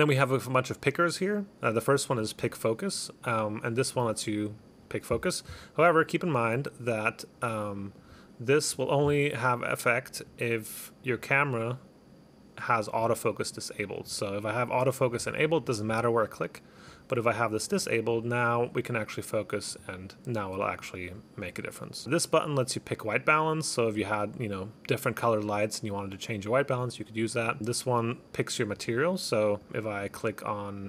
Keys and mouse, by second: 2.2 click, 2.5 click, 3.3 click, 4.0 click, 4.1 click, 4.6 click, 7.5 click, 8.1 click, 8.6 click, 10.3 click, 11.2 click, 13.1 click, 14.1 click, 15.1 click, 15.3 click, 15.5 click, 15.7 click, 15.9 click, 17.1 click, 17.8 click, 18.1 click, 19.9 click, 20.1 click, 21.5 click, 22.0 click, 27.5 click, 29.7 click.